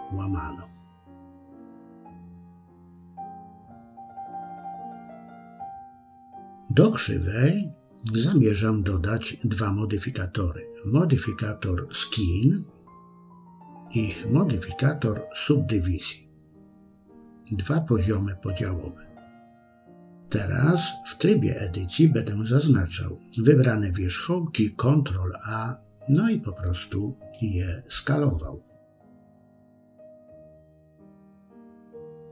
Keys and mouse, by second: 0.7 e, 3.0 click, 4.6 e, 9.3-12.2 drag, 13.9-15.9 drag, 20.1 click, 22.1 click, 23.3 ctrl+a, 27.0 ctrl+a, 29.6 click, 30.2 shift+click, 31.4 ctrl+a.